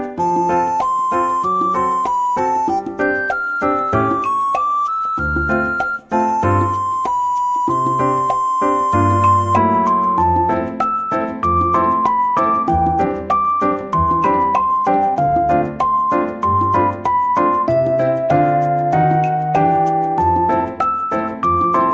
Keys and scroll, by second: 3.9 Tab, 6.3 Tab, 8.3 F2, 11.4 Tab, 12.3 Tab, 21.8 Tab.